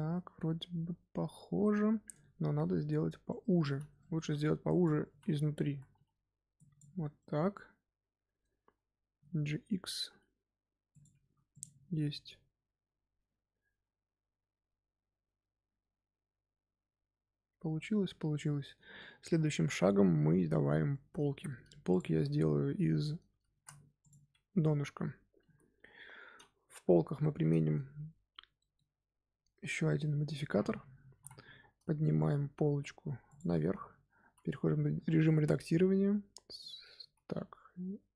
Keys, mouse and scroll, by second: 2.1 Tab, 2.4 scroll down 1, 2.6 a, 3.2 middle click, 3.6-6.9 typing, 3.9 middle click, 4.6 click, 6.5 click, 7.1-9.0 middle drag, 9.0 g, 11.2 Tab, 11.4 click, 11.9-14.9 middle drag, 18.1 scroll down 2, 18.4-20.9 shift+middle drag, 20.9-21.3 scroll up 2, 21.3-21.8 shift+middle drag, 21.8 click, 23.5 shift+d, 25.4 KP_1, 26.5 z, 27.1-28.1 shift+middle drag, 28.1-28.5 scroll down 2, 28.5-28.8 shift+middle drag, 28.8-29.6 scroll up 1, 31.0 g, 33.4 middle click, 33.8 Tab, 34.2 z, 34.6 middle click, 34.9 a, 35.4 z, 35.7 z, 36.2-36.5 scroll up 2, 36.5 middle click, 36.9 z, 37.3 z.